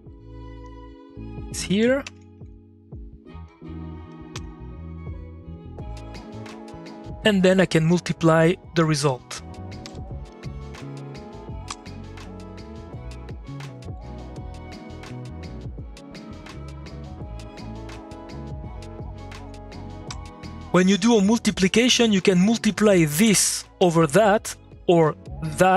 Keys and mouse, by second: 0.6 click, 0.8 middle click, 1.3 click, 2.0 ctrl+c, 2.2 middle click, 3.4 click, 3.6 middle click, 4.0 click, 4.7 click, 5.3 middle click, 5.5-7.7 drag, 8.2 middle click, 9.0 click, 9.8 3, 10.2 middle click, 10.3 click, 11.6 m, 13.6-19.1 ctrl+drag, 20.0 2, 22.6 click, 22.9 2, 23.4 click, 23.7 3, 25.3 click.